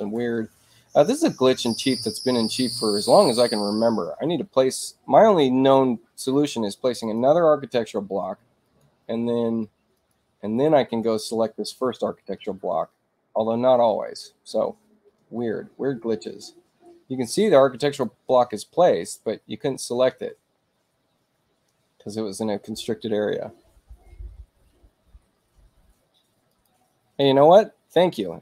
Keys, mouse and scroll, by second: 0.0 click, 2.1 click, 6.3 click, 7.0 click, 7.9 space, 8.6 click, 9.9 click, 10.7 Return, 11.3 Return, 11.9 Return, 12.3 Return, 13.8 click, 17.0 space, 17.8 click, 22.6 click, 26.5 click.